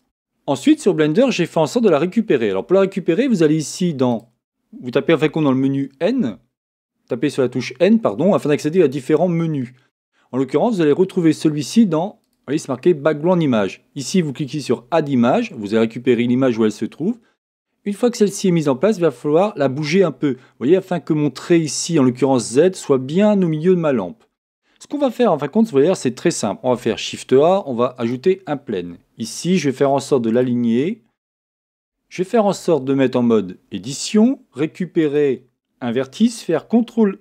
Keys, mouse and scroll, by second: 5.5 click, 26.7 shift+a, 31.8 Tab, 35.0-36.6 drag, 36.6 right click, 36.8 click.